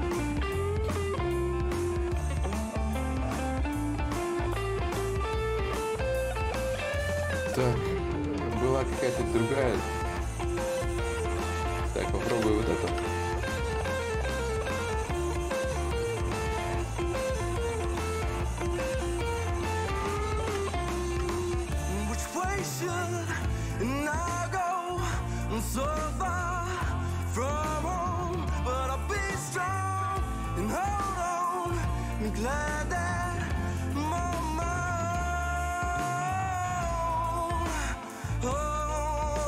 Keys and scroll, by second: 13.0 space, 17.3 space, 21.1 ctrl+z, 30.9 ctrl+z.